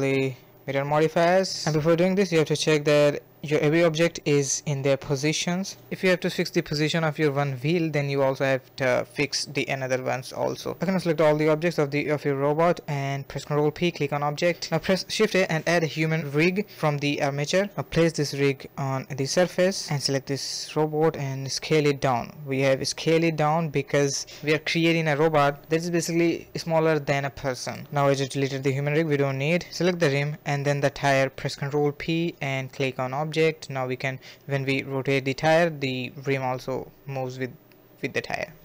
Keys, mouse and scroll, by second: 0.6-1.6 scroll down 1, 1.6 ctrl+a, 2.7 click, 3.7 ctrl+a, 3.9 click, 4.9-6.0 scroll down 5, 6.0-7.1 scroll up 1, 7.1 scroll up 3, 7.1 click, 8.3 ctrl+a, 9.2 a, 9.3 a, 9.6 middle click, 10.0 a, 10.4 a, 11.5 shift+click, 11.9 ctrl+p, 12.9 KP_1, 13.5 shift+a, 15.8 g, 17.1 g, 18.7 click, 19.3 click, 19.8 s, 20.6 g, 21.3 click, 22.2 KP_Decimal, 22.9 click, 23.1 s, 23.2 g, 24.0 click, 24.4 x, 25.0-25.6 middle drag, 25.6-26.2 scroll up 4, 26.2-26.6 shift+middle drag, 26.6 scroll up 1, 26.9-27.7 shift+middle drag, 27.7 click, 30.7 click, 31.3 r.